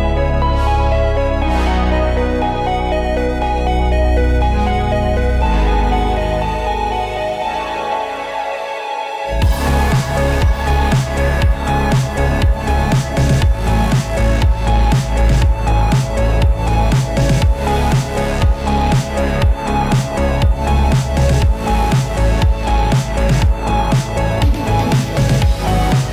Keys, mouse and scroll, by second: 0.2 scroll down 1, 0.7 middle click, 0.9 scroll up 1, 2.0-6.2 drag, 7.9 ctrl+space, 8.2-9.4 typing, 10.3 Down, 11.1 Return, 13.8 click, 14.1-15.9 drag, 16.5-17.3 typing, 19.2-26.1 drag.